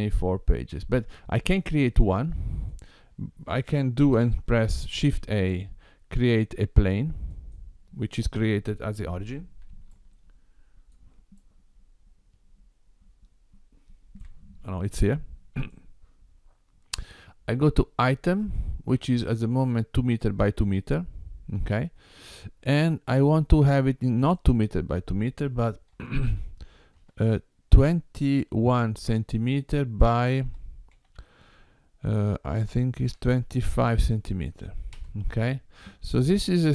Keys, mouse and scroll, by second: 2.8 click, 4.9 shift+a, 9.9 shift+middle click, 11.5 shift+middle click, 15.6 click, 18.4 click, 24.2 click.